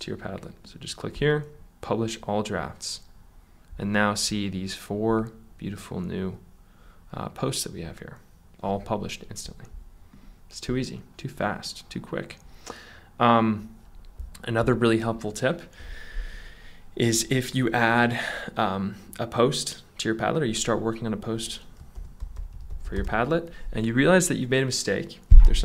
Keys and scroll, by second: 21.7-23.6 typing.